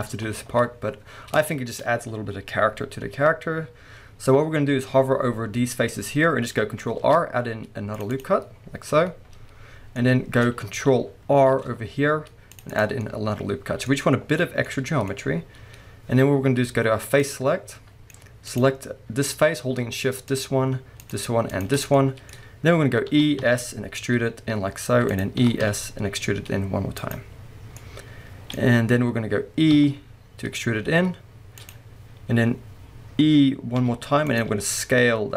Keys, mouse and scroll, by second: 0.0 alt+a, 0.8 scroll up 1, 1.4-14.6 shift+middle drag, 4.2-6.9 scroll up 2, 6.9 ctrl+r, 8.2 click, 8.6-10.0 scroll down 2, 11.5 ctrl+r, 12.8 click, 13.9-14.6 scroll up 2, 14.6 scroll down 1, 14.6-17.2 middle drag, 17.2 click, 17.7 middle click, 18.5 click, 20.3 shift+click, 21.0 shift+click, 21.5 shift+click, 21.9-25.2 middle drag, 23.1 e, 25.2 click, 25.4-27.1 middle drag, 25.4 e, 27.1 click, 27.8-31.7 middle drag, 29.7 e, 31.7 click, 33.8 middle click, 33.8 e, 34.4 click, 34.5-35.3 middle drag, 34.5 s.